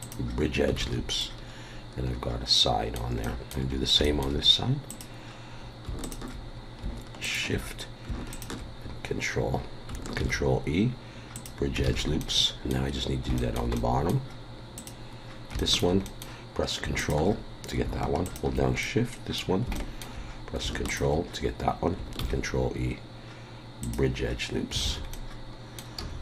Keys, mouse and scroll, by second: 0.8 alt+a, 1.2 middle click, 3.2 middle click, 3.7 scroll up 1, 4.0 shift+middle click, 4.9 click, 6.0 ctrl+click, 7.2 shift+click, 8.3 ctrl+click, 8.9 scroll down 1, 10.2 ctrl+e, 11.8 alt+a, 12.2 middle click, 13.4 shift+middle click, 13.7 middle click, 13.7 scroll up 1, 14.8 click, 15.3 scroll down 2, 15.6 shift+middle click, 16.0 middle click, 17.0 ctrl+click, 18.2 shift+click, 18.8 middle click, 19.7 shift+middle click, 20.9 ctrl+click, 22.2 ctrl+e, 24.8 alt+a, 25.1 middle click, 26.0 a.